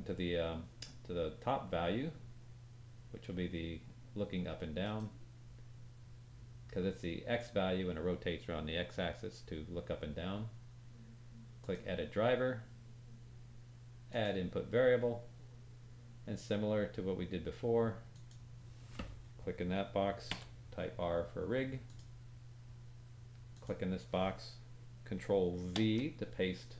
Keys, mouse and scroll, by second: 4.8 right click, 26.0-26.7 drag.